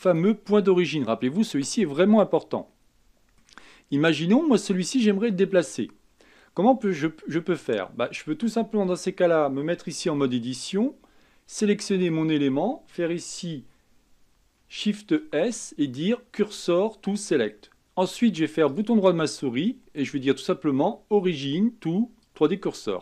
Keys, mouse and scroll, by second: 0.5-2.0 scroll up 4, 2.5-3.5 middle drag, 3.5-5.5 scroll up 1, 5.5-7.3 scroll down 2, 10.0 Tab, 11.9 click, 15.2 shift+s, 17.8-23.0 right drag.